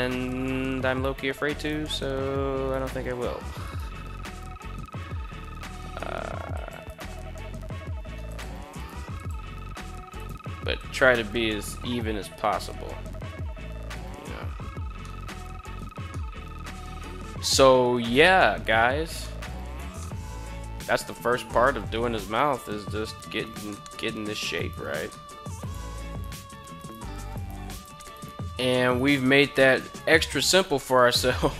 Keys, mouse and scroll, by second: 0.5 right click, 1.1 shift+right click, 2.1 right click, 3.0 shift+right click, 4.7 g, 6.1 click, 6.4 right click, 6.6 g, 7.8 click, 8.3 right click, 8.4 g, 8.7 click, 9.6 right click, 9.9 g, 10.3 click, 10.6 Tab, 14.5-15.3 middle drag, 15.6-18.4 middle drag, 18.7 middle drag, 19.3 Tab, 19.5-20.8 middle drag, 21.1 middle click, 23.2 middle click, 24.1 alt+right click, 24.6 middle click, 25.0 right click, 25.6 shift+right click, 26.3 shift+right click, 26.8 shift+right click, 27.3 shift+right click, 27.6 shift+right click, 28.4 shift+right click, 28.7 shift+right click, 29.1 shift+right click, 29.4 shift+right click, 29.8 shift+right click, 30.3 middle click, 30.9 KP_7.